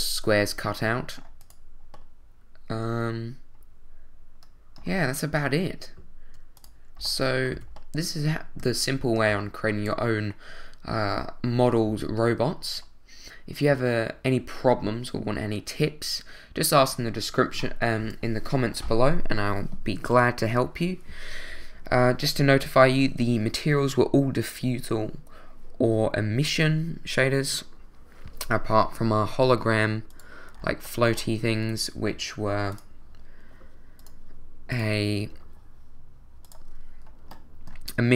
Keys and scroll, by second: 7.5 a.